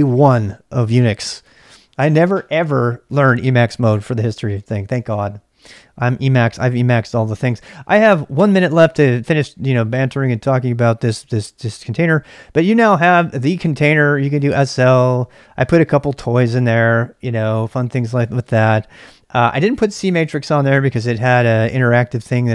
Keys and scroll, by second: 12.5-13.3 typing.